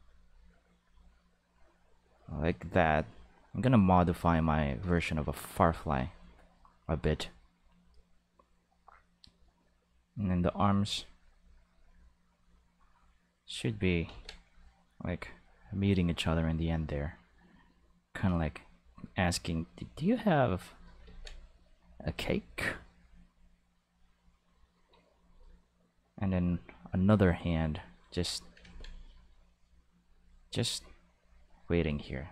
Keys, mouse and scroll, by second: 0.2 click, 1.1 click, 2.2 click, 2.7 click, 3.2 click, 3.8 click, 10.4 click, 11.0 click, 11.6-13.3 drag, 14.0 ctrl+z, 14.3 click, 14.8 click, 16.1 click, 17.1 click, 17.9 click, 18.5 click, 19.4 click, 19.7 click, 20.3 click, 21.0 ctrl+z, 21.3 click, 21.9 click, 22.3 click, 22.9 click, 23.1 click, 23.8 click, 25.8 click, 26.4 click, 27.2 click, 27.6 click, 28.6 ctrl+z, 28.9 click, 29.5 click, 29.9 click, 30.4 click, 30.9 click, 31.3 click.